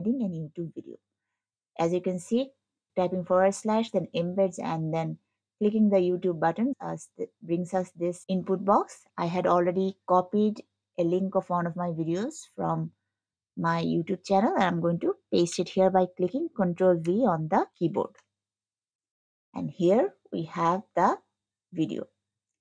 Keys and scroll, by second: 20.8 scroll.